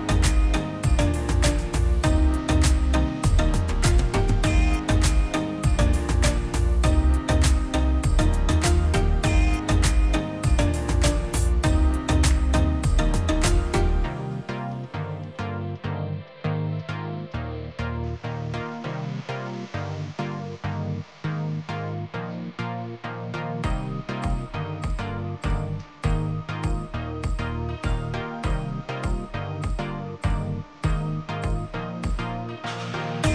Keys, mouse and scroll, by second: 4.9 double click, 6.3 m, 30.9 Return, 31.3 0.